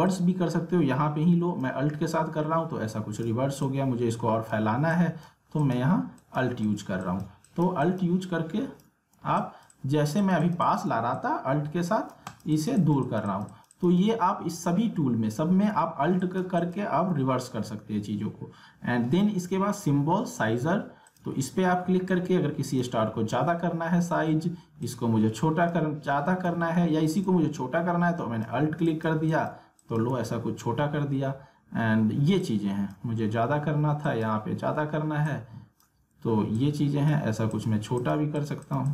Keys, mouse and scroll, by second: 11.4 alt+click, 16.2 alt+click, 21.1-24.1 drag, 24.1 ctrl+z, 24.8-26.4 drag, 26.4 ctrl+z, 27.2-29.0 alt+drag, 32.4-38.9 drag.